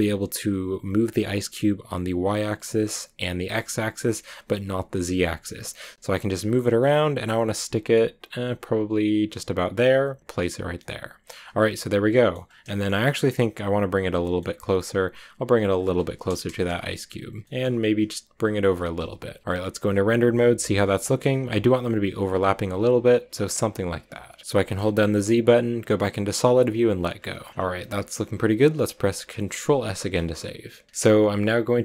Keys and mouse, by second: 10.2-10.6 drag, 10.6-12.3 middle drag, 12.6 shift+middle drag, 14.0 g, 14.0-15.4 drag, 15.6 click, 16.5 KP_0, 17.4 g, 18.4-19.1 drag, 19.1 a, 19.1 z, 21.1 g, 22.2 a, 24.8 z, 27.8 shift+middle click, 29.6 ctrl+s.